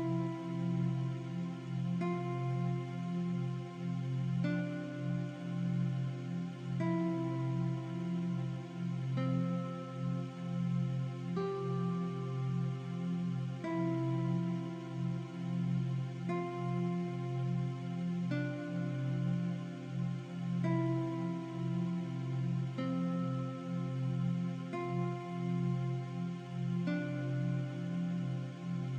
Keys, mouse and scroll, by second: 1.6 click, 1.8 v, 1.8 click, 2.7 i, 2.9 click, 3.1 v, 3.2 click, 6.5 click, 9.9 click, 10.3 shift+click, 10.7 shift+click, 10.9 click, 12.1 click, 12.7-15.2 typing, 13.3 click, 13.7 click, 14.2 click, 14.7 click, 15.2 click, 17.9 click, 19.6 v, 19.7 click, 19.9 t, 20.2 click, 22.6-23.0 scroll up 1, 26.0 click, 27.2 click.